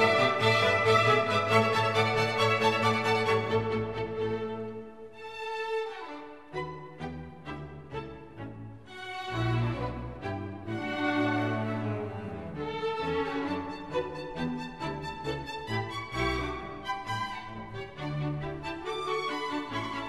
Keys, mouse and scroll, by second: 4.7 Down, 10.1 double click.